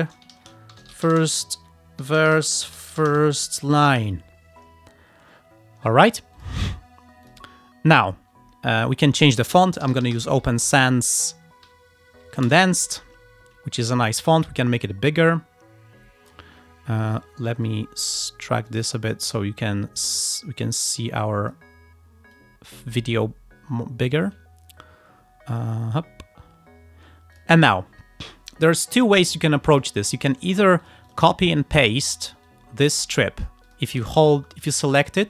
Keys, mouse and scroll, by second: 0.0-0.2 typing, 0.4 ctrl+a, 0.8 ctrl+shift+f, 0.9 ctrl+shift+i, 1.0 ctrl+shift+r, 1.1 ctrl+shift+s, 1.2 ctrl+shift+t, 1.2-4.6 typing, 6.4 click, 7.3 click, 9.0 click, 9.7-10.7 typing, 11.1 Down, 11.8 Up, 12.7 Return, 14.4-16.6 drag, 17.7 click, 18.8 click, 19.4 click, 20.8 click, 22.4 click, 27.4 click, 30.0 click, 30.4 alt+click, 30.9 alt+click, 32.5 alt+click, 33.7 alt+click, 34.5 alt+Delete, 34.7 alt+click.